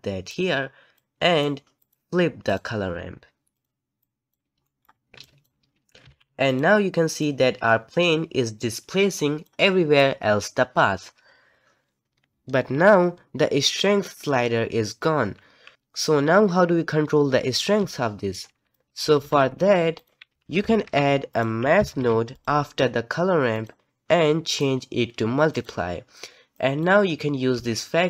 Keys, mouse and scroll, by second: 0.9-3.6 drag, 4.0-4.7 drag, 4.7-5.2 middle drag, 5.2 click, 6.0 g, 7.2 click, 17.8-18.7 middle drag, 18.7-19.1 drag, 19.1 g, 20.3 alt+a, 24.5-28.0 drag.